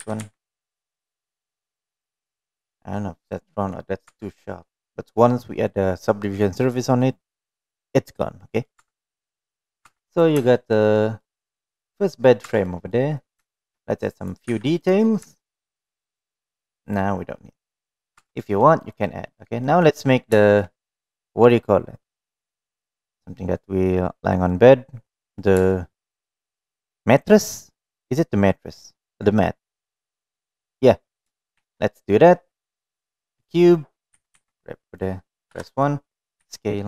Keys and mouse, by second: 0.8 g, 3.6 middle click, 4.5 middle click, 5.1 Tab, 5.3-6.0 middle drag, 6.9-7.3 middle drag, 7.9-8.4 middle drag, 9.2 middle drag, 10.2 Tab, 10.2 middle click, 10.7 Tab, 11.3 shift+middle click, 11.7-12.1 middle drag, 12.5-13.0 middle drag, 13.4 Tab, 13.5 middle click, 14.4 shift+middle click, 15.0 click, 15.4 3, 15.7 click, 16.2 shift+middle click, 17.7 click, 18.3 middle click, 19.1 Tab, 19.3 middle drag, 19.8 click, 20.5 middle click, 21.4 shift+middle click, 21.7-22.1 middle drag, 25.5-26.2 middle drag, 26.7 shift+middle drag, 32.5 shift+a, 35.1 g, 36.5 KP_1.